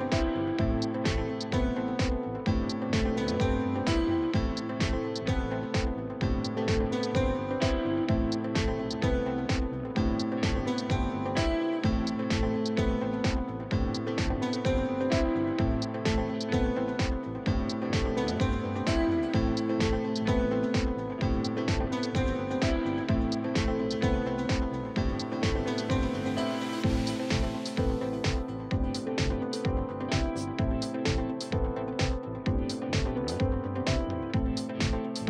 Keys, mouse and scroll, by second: 0.2 e, 1.4-2.4 drag, 4.4 shift+click, 5.2 e, 6.4-7.5 drag, 8.0-9.7 drag, 9.7 scroll up 4, 10.1 shift+click, 10.3 shift+middle click, 10.5 scroll down 1, 11.0 e, 12.2 click, 13.1 click, 16.2-16.5 scroll down 2, 16.5 KP_1, 16.8 scroll up 2, 17.0 shift+middle click, 17.6 click, 18.1 shift+middle click, 18.7 alt+click, 19.7-21.5 alt+drag, 21.5 middle click, 22.2 alt+click, 22.5 KP_1, 23.8 middle click, 24.4 alt+click, 24.7 KP_1, 25.1-26.2 drag, 26.6-27.6 drag, 27.6 middle click, 28.3 middle click, 28.6 alt+click, 29.5 shift+middle click, 29.8 alt+click, 30.1 alt+click, 30.2 middle click, 30.7-32.2 drag, 32.2 shift+middle click, 33.0 scroll down 3, 33.1-34.2 middle drag, 34.2-35.2 alt+drag.